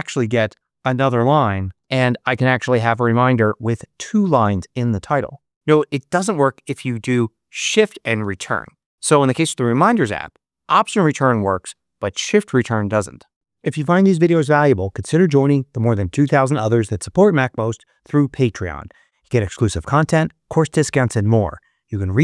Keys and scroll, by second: 0.8-2.9 typing, 5.5 BackSpace, 8.1 shift+Return.